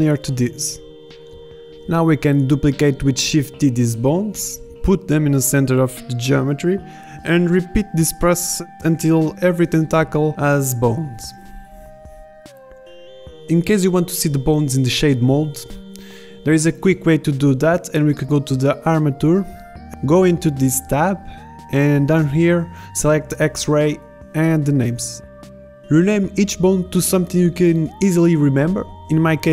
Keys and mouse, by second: 0.4 middle click, 0.9 right click, 1.7 click, 2.2 ctrl+z, 3.0 b, 4.0 b, 5.2 shift+d, 6.2 r, 6.9 g, 10.1 click, 10.7 g, 11.4 click, 11.9-13.8 typing, 14.5 click, 14.5 click, 15.2 middle click, 15.4 z, 22.7 click, 26.0-27.0 right drag.